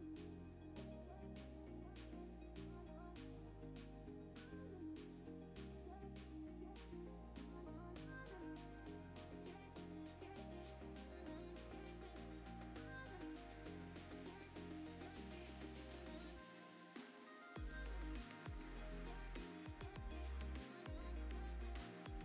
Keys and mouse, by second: 0.6 click, 0.9 click, 1.1 click, 2.0 alt+shift+click, 2.5 click, 2.8 click, 3.4 click, 3.6 middle click, 3.7 Tab, 4.1 middle click, 4.4 3, 4.6 middle click, 5.2 middle click, 5.6 shift+d, 5.9 p, 6.3 Tab, 6.9 Tab, 7.0 a, 7.2 s, 7.2 x, 7.8 click, 7.9 ctrl+r, 9.0 Escape, 9.2 3, 9.4 middle click, 9.7 z, 10.0 click, 10.5 shift+click, 10.8 ctrl+shift+click, 11.0 x, 11.4 a, 11.5 middle click, 11.8 e, 12.0 click, 12.1 2, 12.2 click, 12.6 ctrl+click, 13.2 g, 13.7 click, 13.7 z, 13.8 Tab, 13.9 z, 14.7 click, 15.5 click, 15.9 click, 16.4 middle click, 17.9-19.3 typing, 18.2 click, 18.3 click, 18.8 click, 19.1 click, 19.3 click, 19.4 click, 19.6 middle click, 20.5 middle click, 20.8 ctrl+s, 20.9 shift+middle click, 21.2 click, 21.6 shift+click, 21.9 ctrl+p.